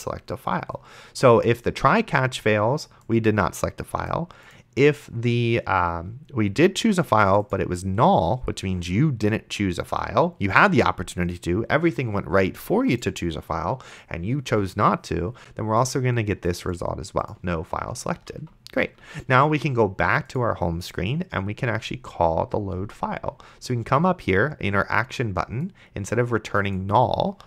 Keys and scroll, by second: 18.4 ctrl+s.